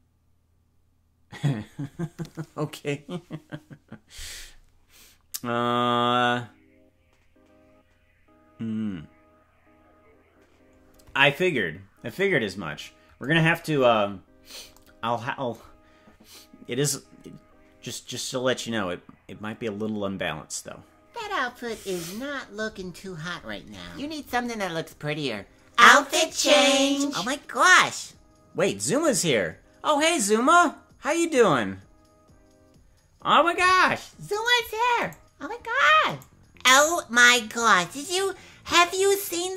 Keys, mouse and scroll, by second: 13.7-14.7 scroll up 7, 34.5 right click, 35.0 right click, 36.1 right click.